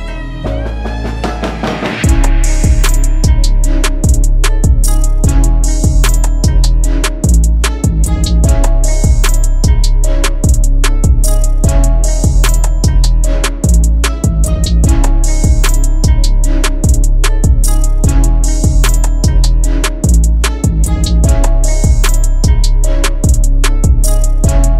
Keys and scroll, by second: 1.1 shift+F2, 12.7 F4, 15.5 shift+F2, 19.9 shift+F2, 22.6 F4, 23.2 ctrl+shift+a.